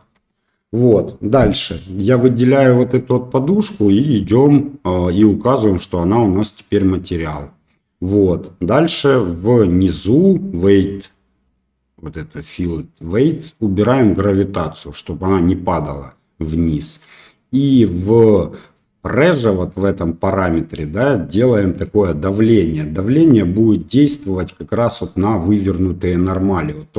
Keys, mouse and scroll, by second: 0.1 Tab, 0.5 middle click, 7.8 middle click, 11.4 click, 14.9 click, 15.7 middle click, 19.6 click, 22.0 middle click, 23.1 middle click.